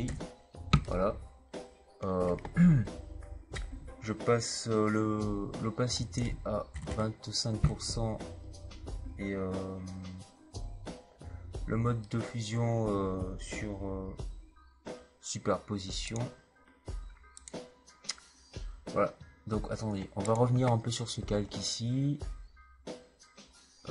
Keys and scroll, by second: 6.6 KP_2, 6.8 KP_5.